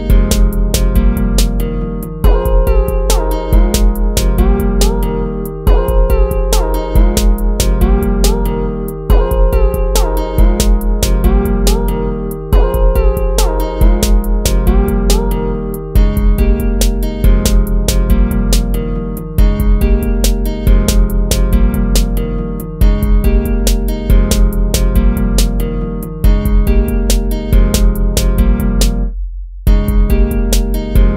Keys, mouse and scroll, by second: 8.5 ctrl++, 9.5 ctrl+-, 9.8 ctrl++, 11.5 ctrl+-, 12.1 ctrl++, 29.5 ctrl+-.